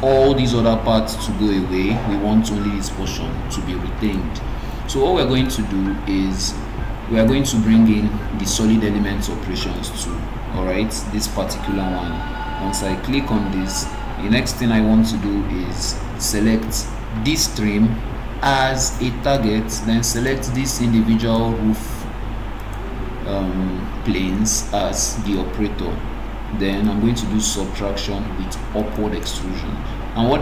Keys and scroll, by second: 8.4 Escape.